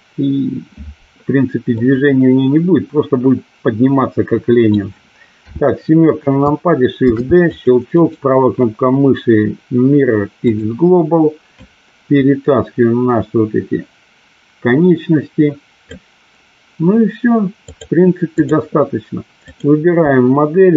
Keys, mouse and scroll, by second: 1.8-4.8 middle drag, 5.6 KP_7, 7.1 shift+d, 8.1-10.7 right drag, 11.7-15.9 drag, 17.8 click, 19.6 click.